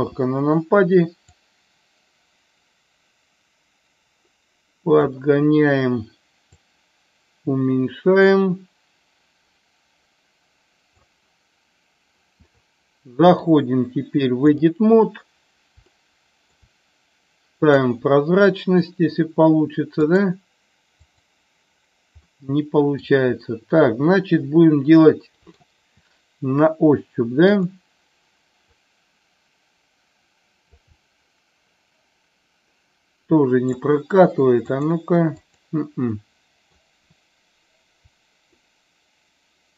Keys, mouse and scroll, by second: 1.3-5.0 drag, 6.6-10.9 drag, 13.3-14.6 drag, 15.9 shift+middle click, 17.6 click, 20.0 click, 21.0 click, 22.3 middle click, 23.5-25.6 middle drag, 27.5 click, 28.6-30.8 drag, 30.9-33.8 middle drag, 34.9 click, 35.3 click, 36.1 middle click, 36.5 middle click, 38.6 shift+middle click, 39.1 shift+middle click.